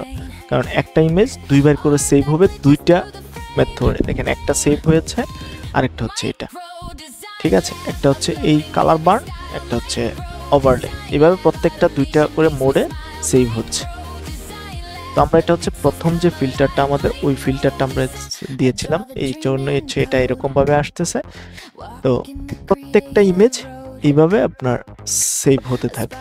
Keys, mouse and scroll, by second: 2.9 click, 4.7 Right, 7.1 Left, 8.6 Right, 11.0 Right, 11.3-11.7 typing, 12.3 Right, 14.4 click.